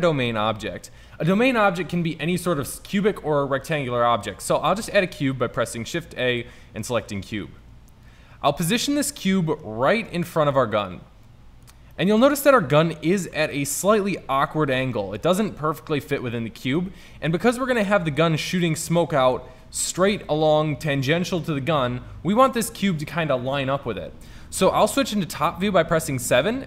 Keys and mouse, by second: 4.5 shift+a, 9.4 middle drag, 12.4 middle drag, 14.2 middle click, 14.9 middle drag, 15.5 middle drag, 16.1-17.0 middle drag, 17.5-18.2 middle drag, 24.9 KP_7.